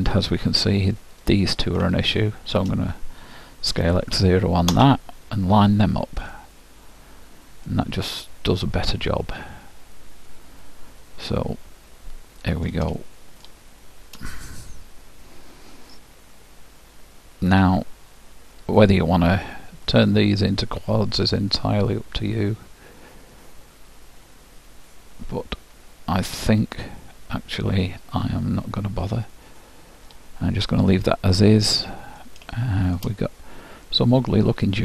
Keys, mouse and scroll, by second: 1.3-4.1 drag, 3.8 s, 5.7-8.2 middle drag, 13.2-16.2 middle drag, 18.8-22.4 drag, 21.6-23.5 middle drag, 30.7-34.8 middle drag.